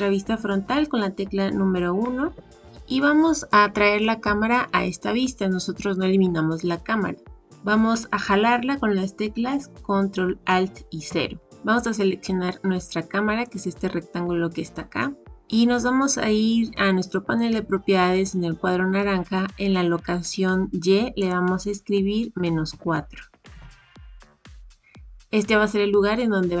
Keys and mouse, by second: 2.2 KP_1, 11.0 ctrl+alt+KP_0, 13.4 click, 21.3-26.6 drag.